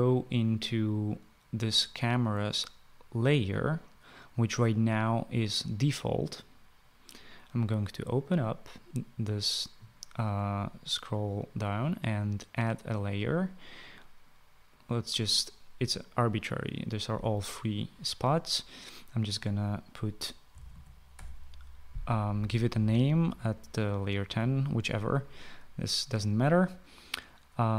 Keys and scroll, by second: 20.4-21.8 typing.